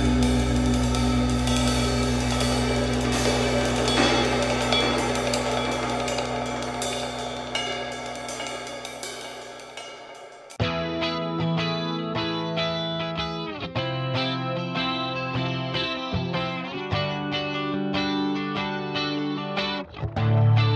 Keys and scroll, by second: 18.3 super+c, 18.4 super+v.